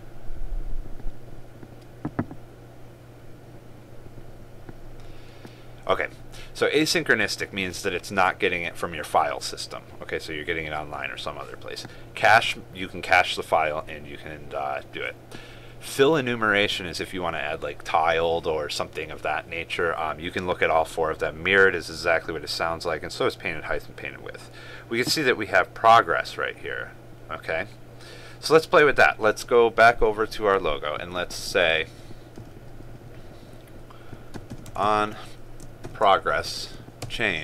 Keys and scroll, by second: 34.9 ctrl+space.